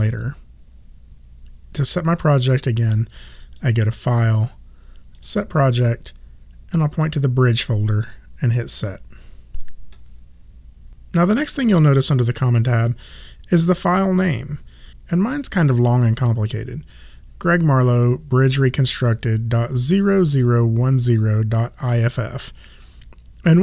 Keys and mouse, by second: 3.4 click.